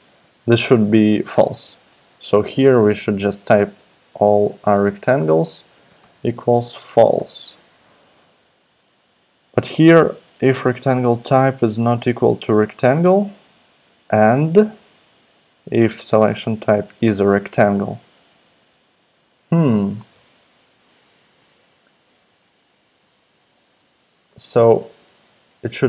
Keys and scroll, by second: 1.3 Return, 3.5-4.7 typing, 5.0 Down, 5.2 Tab, 5.9-7.6 typing.